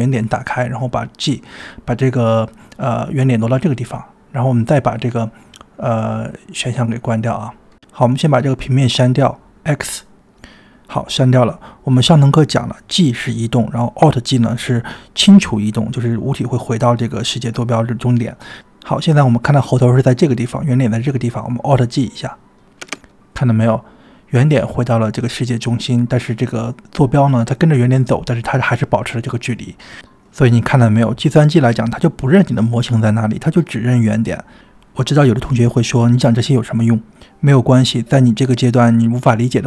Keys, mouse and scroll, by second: 2.0 click, 2.6 g, 3.8 Tab, 5.1-6.4 drag, 6.5 click, 7.3 click, 8.9 click, 10.4 x, 11.9 click, 22.9 alt+g, 23.4 scroll down 1, 24.5 click, 24.5 scroll down 1, 36.1-37.0 drag.